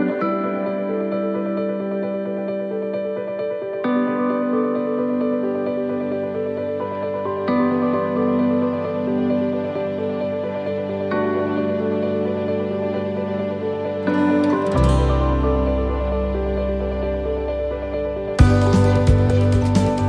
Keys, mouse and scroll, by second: 1.4 middle click, 2.0-2.4 scroll down 4, 2.4 middle click, 3.8 shift+middle click, 4.2 scroll up 1, 4.5 middle click, 5.0 scroll down 2, 5.3 middle click, 6.4 right click, 7.2 alt+shift+right click, 8.2 right click, 9.1 c, 13.1 click, 13.1 middle click, 15.3 shift+middle click, 16.3 middle click, 17.4 middle click, 17.5 shift+middle click, 17.9 shift+middle click, 19.0 click.